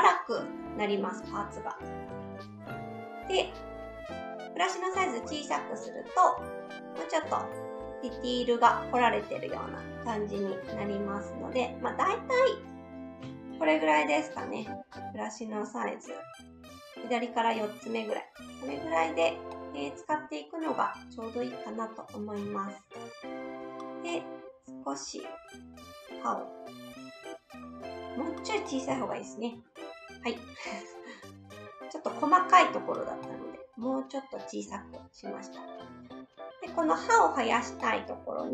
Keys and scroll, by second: 2.1 ctrl+z, 2.7 s, 10.7 ctrl+z, 13.2 s, 28.8 ctrl+z, 29.5 s.